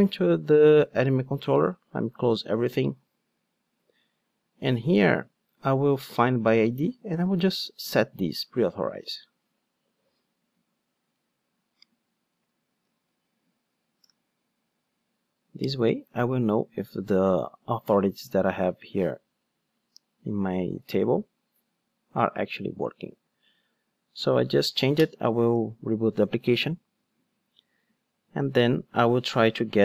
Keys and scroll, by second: 9.0 super+c, 12.8 super+v, 25.1 ctrl+d.